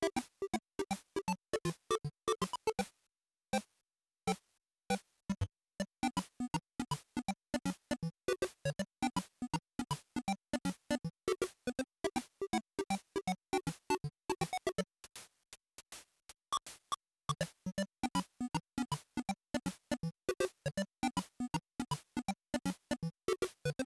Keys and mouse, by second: 6.3-7.8 drag, 12.0 z, 21.3 click.